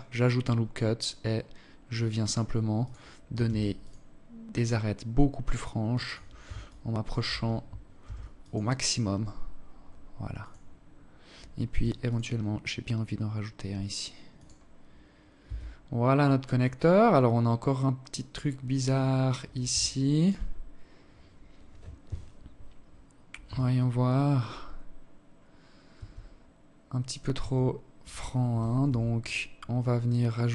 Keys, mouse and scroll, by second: 2.2 ctrl+r, 5.4 alt+shift+click, 6.7 ctrl+r, 10.4 ctrl+r, 13.5-14.2 scroll down 6, 14.2 Tab, 14.7 scroll down 2, 14.9-15.6 scroll up 2, 15.6-15.9 scroll down 1, 15.9 scroll up 1, 16.1-16.4 scroll down 1, 16.4-17.1 scroll up 1, 18.6 alt+shift+click, 19.2 scroll up 3, 22.2 z, 22.8-23.8 scroll up 1, 24.6 z, 26.1 z, 27.5 Tab, 28.8 scroll up 1, 29.1 scroll down 1, 30.1 alt+shift+click.